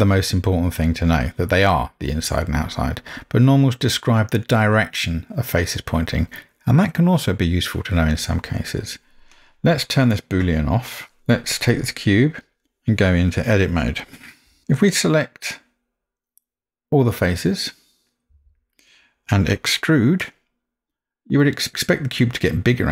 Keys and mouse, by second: 11.7-12.6 middle drag, 14.5 Tab, 18.4 a.